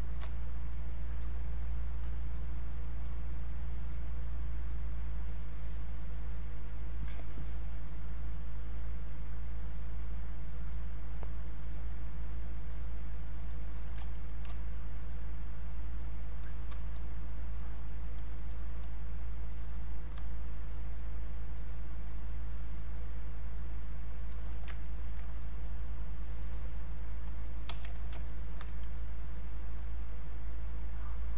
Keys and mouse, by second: 1.0 click, 7.5 click, 13.7 alt+click, 14.1 ctrl+right click, 15.0-16.4 drag, 16.4 click, 17.5-20.2 drag, 20.2-24.5 shift+drag, 24.9 ctrl+right click, 25.5-27.6 drag, 27.6 q, 28.0 alt+click, 28.3 ctrl+right click, 29.8-31.3 ctrl+drag.